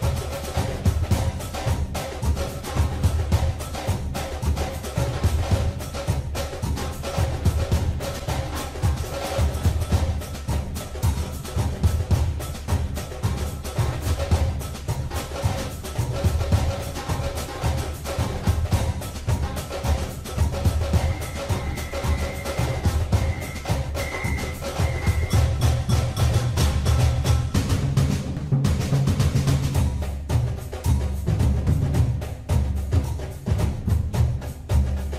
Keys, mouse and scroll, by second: 1.5 ctrl+r, 8.5 click, 13.2 click, 19.6 3, 21.0 click, 23.1 n, 25.6 e, 29.8 click, 31.9 e.